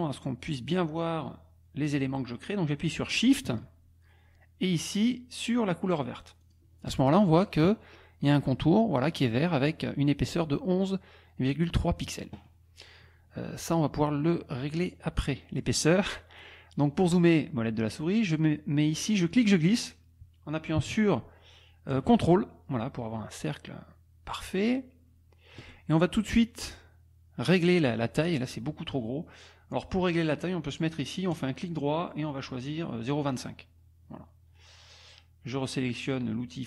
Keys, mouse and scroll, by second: 6.5 shift+click, 15.7 click, 17.0 click, 19.3-25.7 drag, 31.3 click, 33.4 click.